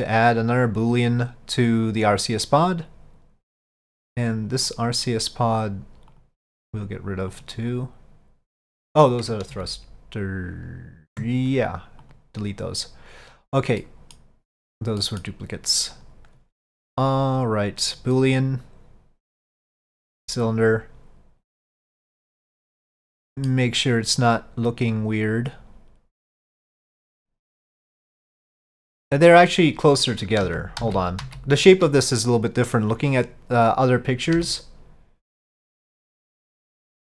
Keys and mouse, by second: 2.0 click, 4.8 click, 9.6 ctrl+z, 13.3 click, 13.9 middle click, 15.1 middle click, 16.1-18.4 drag, 19.4 click, 23.0-23.6 middle drag, 27.1 click, 34.4 ctrl+z.